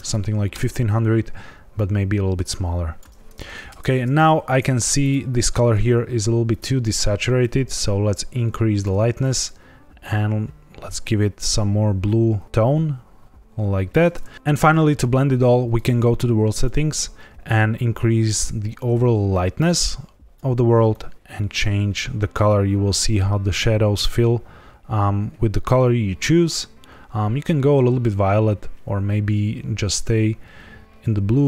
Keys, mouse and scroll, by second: 0.0 KP_0, 1.7 click, 3.8 ctrl+s, 4.9 click, 6.4 click, 15.7 click, 16.5 click.